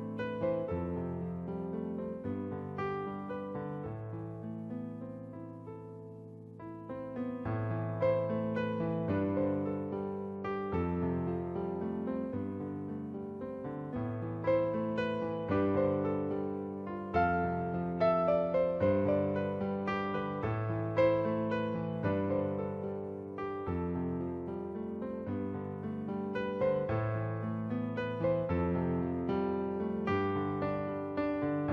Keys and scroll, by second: 2.2 Return, 11.4 space, 13.5 space, 17.0-17.5 typing, 22.0 space, 24.2 space, 25.9-26.3 typing, 27.9-31.7 typing.